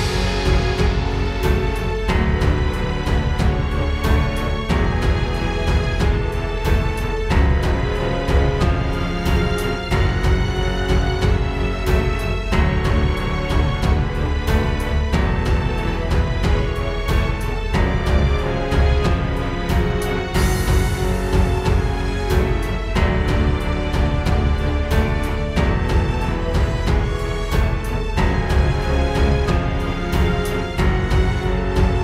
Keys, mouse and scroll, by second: 1.4 click, 4.0 shift+click, 7.7 shift+click, 12.0 click, 16.0 click, 20.0 click, 23.9 click, 26.6 click, 29.7 click, 31.3 middle click, 31.3-31.9 scroll down 2.